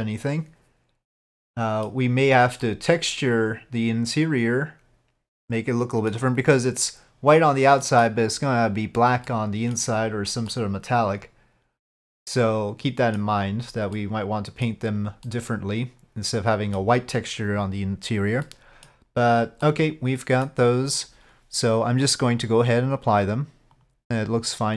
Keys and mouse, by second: 2.7-6.2 middle drag, 7.9 middle click, 9.3-9.8 middle drag, 10.6-13.3 middle drag, 14.1 middle drag, 14.3-14.8 drag, 15.3-16.8 middle drag, 18.5-19.0 middle drag, 19.7-20.5 middle drag, 22.5 click, 23.9 click.